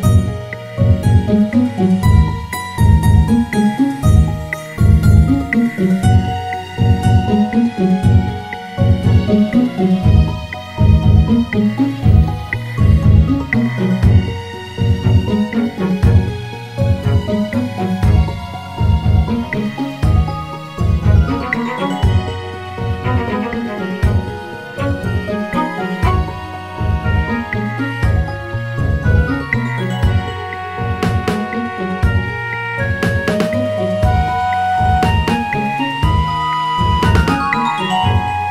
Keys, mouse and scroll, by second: 2.8 click, 3.8 click, 4.6 click, 5.2 shift+click, 6.3 Delete, 9.7 click, 10.4-11.6 scroll up 2, 11.6 click, 12.5 click, 13.4 g, 16.0 click, 16.4 g, 19.4 alt+shift+click, 21.6 click, 22.6-24.9 scroll down 2, 24.9-25.8 scroll up 1, 25.8 g, 29.1-30.8 scroll down 1, 30.8 click, 33.4 e, 38.0-38.5 drag.